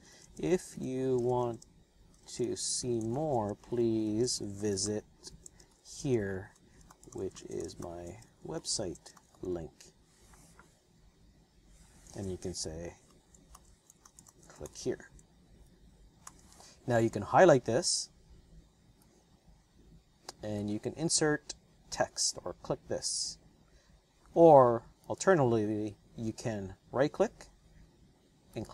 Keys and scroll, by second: 0.0-9.7 typing, 12.0 space, 13.1-16.2 typing.